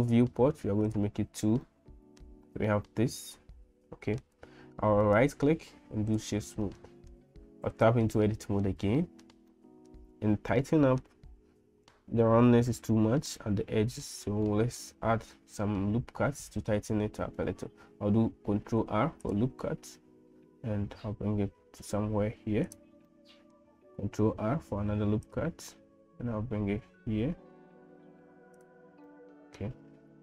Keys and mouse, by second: 1.0 click, 1.6 middle click, 2.7-4.3 middle drag, 5.0-6.2 drag, 6.6 middle click, 7.7 Tab, 8.3 middle click, 9.0 middle click, 9.5 shift+middle click, 10.6 middle click, 13.3 middle click, 14.5-16.8 middle drag, 18.8 ctrl+r, 23.1 middle click, 24.2 ctrl+r, 29.2 middle click.